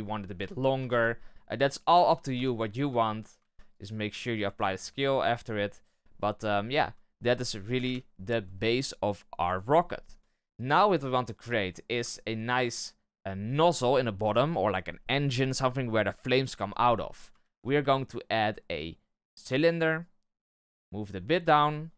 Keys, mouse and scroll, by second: 0.7 g, 1.8 z, 2.3 Tab, 2.6-2.9 scroll down 4, 2.9 shift+middle click, 3.3 ctrl+a, 4.2-4.5 scroll up 1, 4.5-7.8 shift+middle drag, 7.8 KP_1, 12.0-15.2 shift+middle drag, 17.3 shift+a, 20.3 g.